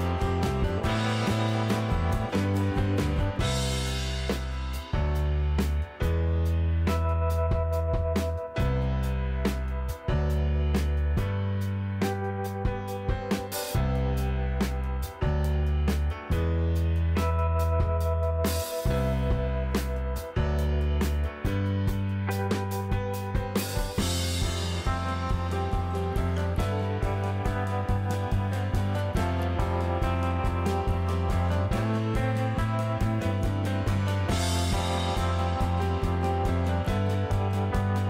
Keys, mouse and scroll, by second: 2.9-4.5 drag, 4.5 n, 6.3 click, 9.3 click, 10.3 s, 12.9-15.4 drag, 16.4 KP_1, 17.1-17.7 scroll up 5, 18.1-18.5 shift+middle drag, 20.3-23.3 drag, 23.7-24.1 middle drag, 24.2-24.7 scroll down 4, 24.8 middle click, 25.2 shift+middle click, 25.7-26.0 middle drag, 26.7 click, 28.2 super+c, 29.0 super+v, 29.6 click, 33.6 click, 34.7 super+c, 34.8 super+v, 35.7 click, 37.1 click.